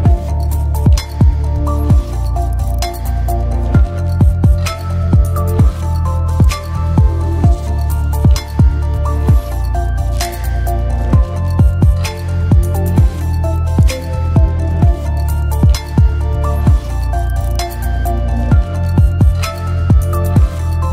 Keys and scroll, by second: 0.4 e, 0.4 space, 10.4-11.3 typing.